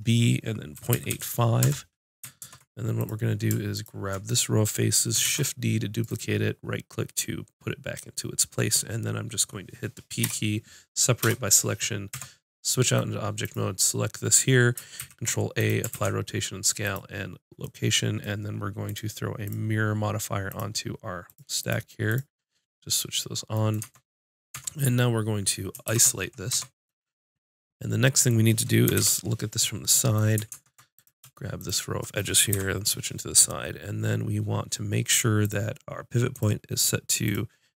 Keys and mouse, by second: 2.4 ctrl+Tab, 3.7-5.2 drag, 5.2 shift+d, 10.2 p, 12.1 Tab, 13.6-15.0 drag, 15.0 ctrl+a, 15.9 ctrl+a, 18.8-23.8 drag, 23.8 Tab, 24.5 Tab, 25.8 shift+h, 26.5 Tab, 28.8 KP_1, 28.9 KP_5, 30.5 ctrl+Tab, 31.6 click, 32.5 KP_1, 35.7-37.7 drag.